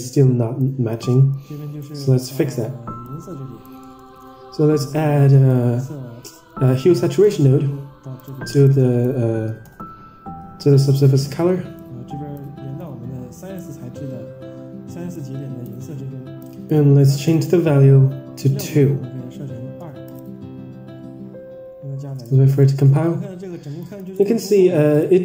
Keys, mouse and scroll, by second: 0.5 click, 1.0 middle click, 1.7-2.5 drag, 3.0 click, 3.7 middle click, 4.0 shift+a, 8.7 click, 10.8-11.3 drag, 11.7 click, 12.7-13.5 drag, 15.0-15.6 drag, 16.3 click, 17.1-20.3 drag, 22.0-22.4 scroll down 4, 22.5 middle click, 23.5 Tab, 24.1 ctrl+shift+drag, 24.9 ctrl+shift+drag.